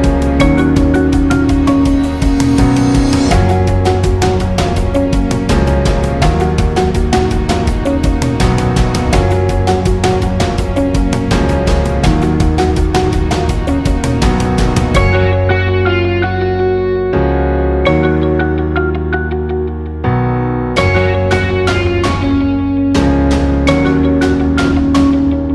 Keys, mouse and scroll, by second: 0.0-4.8 typing, 0.1 click, 0.9 alt+scroll up 1, 1.4 click, 4.0 scroll down 2, 4.5 click, 6.2 click, 6.6 right click, 7.3 click, 7.9 right click, 8.4 click, 10.7 right click, 11.4 click, 11.8 alt+scroll down 1, 12.0 space, 12.2 click, 13.5 click, 13.7 right click, 21.0 click.